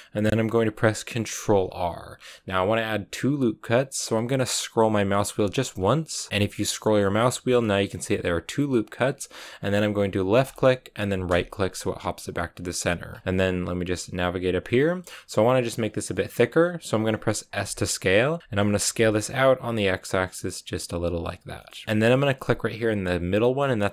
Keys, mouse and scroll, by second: 1.4 ctrl+r, 13.2-14.9 middle drag, 14.9-15.9 scroll down 3, 16.0 middle click, 16.5-17.5 scroll up 2, 17.5 s, 21.5-23.0 shift+middle drag, 23.0-23.9 drag.